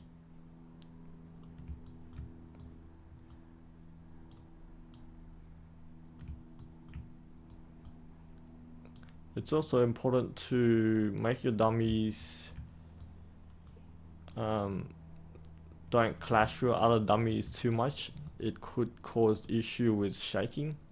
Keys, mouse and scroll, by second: 1.8 ctrl+right click, 4.2 click, 6.5 ctrl+right click, 7.4-8.5 right drag, 8.9-11.8 drag, 12.1 ctrl+right click, 12.9 right click, 14.2-16.3 drag, 16.8 ctrl+right click, 17.8 right click, 19.1-20.9 drag.